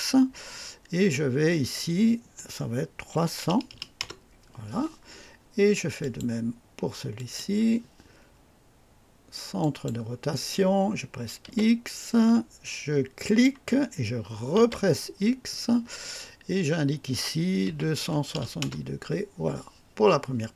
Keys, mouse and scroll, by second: 3.0 KP_3, 3.4 KP_0, 3.4 KP_0, 3.8 KP_0, 3.9 Return, 5.9 click, 7.1 click, 9.5 click, 11.4 x, 13.2 click, 14.5 x, 17.6 KP_2, 17.9 KP_7, 18.3 KP_0, 18.5 KP_Enter.